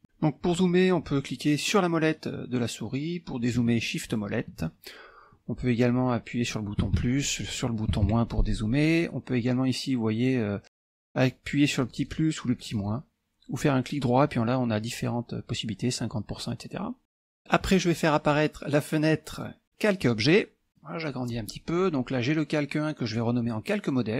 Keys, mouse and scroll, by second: 1.7-3.1 middle drag, 3.8 shift+middle click, 6.9 KP_Add, 7.4 KP_Add, 8.0 KP_Subtract, 11.7 click, 13.6-15.8 right drag, 17.0 middle click, 19.4 click, 20.1 click, 20.8 click, 21.5 scroll up 1, 21.8 middle click, 23.1 click.